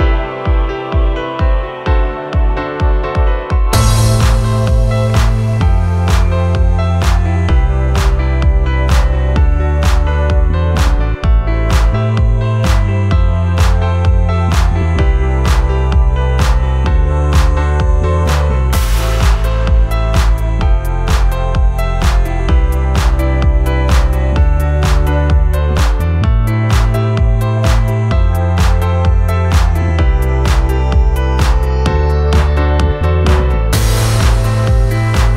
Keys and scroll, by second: 0.0-0.4 typing, 1.6-2.8 typing, 8.3-9.9 typing, 29.4 space, 33.0 KP_3, 33.3 KP_0, 33.5 KP_0, 33.7 Return.